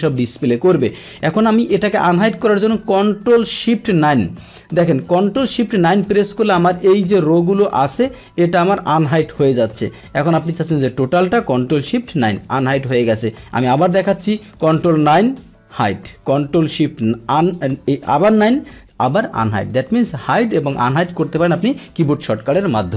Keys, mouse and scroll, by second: 4.6 ctrl+shift+9, 6.2 click, 7.1 click, 9.1 ctrl+shift+9, 10.2-11.2 drag, 11.8 ctrl+shift+9, 12.9 click, 14.8 ctrl+9, 17.1 ctrl+shift+9.